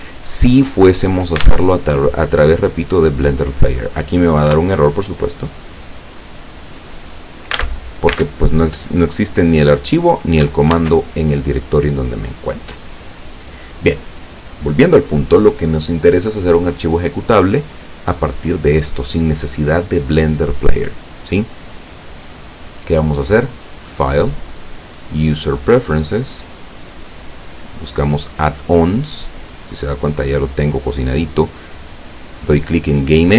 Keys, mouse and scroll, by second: 1.5 alt+Tab, 4.5 Return, 7.7 alt+Tab, 10.9 alt+Tab, 23.3 click, 25.2 click, 26.6 click, 33.2 click.